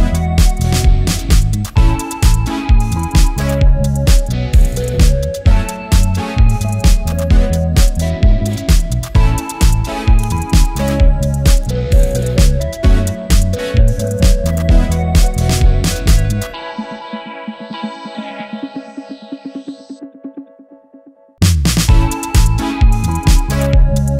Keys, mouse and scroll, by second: 1.1-6.5 drag, 6.5 Return, 7.5 click, 8.7 ctrl+r, 9.1 ctrl+t, 10.0-16.6 drag, 16.6 Return, 18.3 click.